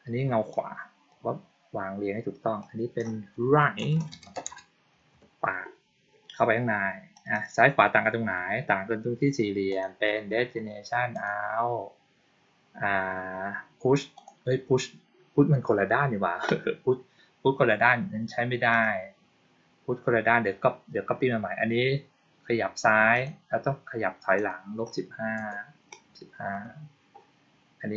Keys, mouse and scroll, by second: 0.4 click, 2.5 click, 7.1 click, 7.2 click, 9.6 click, 11.0 click, 14.1 click, 18.6 click, 23.0 click, 24.3 click.